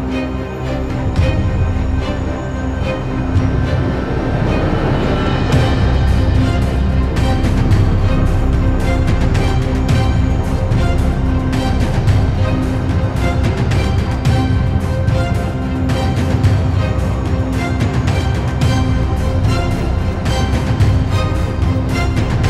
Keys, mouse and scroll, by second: 2.5 middle click, 3.3 i, 5.1 KP_1, 5.8 e, 11.7 shift+z, 12.0 click, 12.4 shift+z, 12.6-13.1 scroll up 4, 13.1 2, 13.3 click, 13.6 alt+shift+click, 13.9 click, 14.2 alt+shift+click, 14.4 alt+shift+click, 15.8 g, 18.4 shift+z, 18.6 click, 18.8 shift+z, 19.3 g, 21.3 scroll down 3, 21.5-22.4 middle drag.